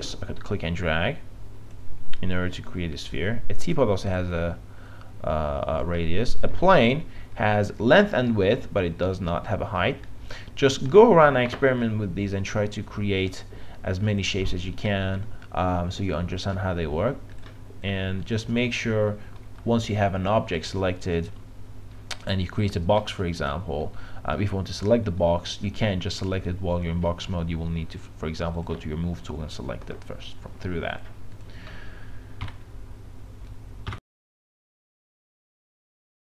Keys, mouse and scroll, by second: 14.4-19.5 drag, 19.5 Delete, 20.6-24.4 drag, 32.4 Delete.